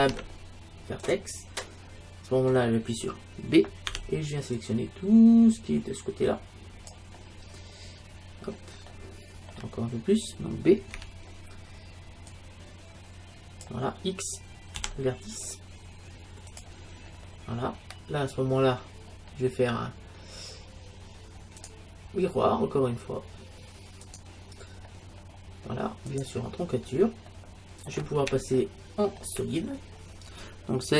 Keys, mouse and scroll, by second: 0.0 ctrl+Tab, 3.9 b, 7.5-10.6 middle drag, 11.0 b, 14.8 x, 17.1-21.7 middle drag, 21.7-23.4 drag, 26.1-28.8 drag, 27.3-30.9 middle drag.